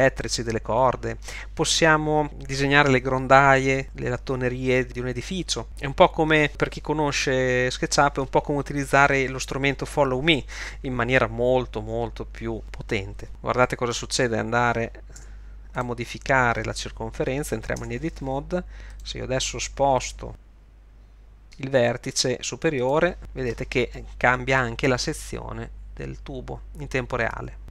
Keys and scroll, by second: 15.2 Tab, 17.8 Tab, 20.3 g.